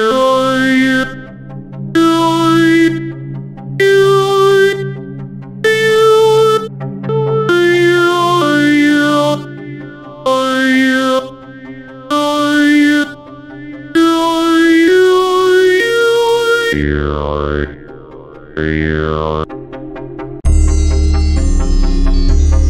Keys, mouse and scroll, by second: 2.9 click, 3.2 F1, 4.6 F1, 4.6 drag, 5.1-7.3 drag, 7.5-13.4 drag, 16.0 click, 17.2 click, 19.4 click, 19.8 click.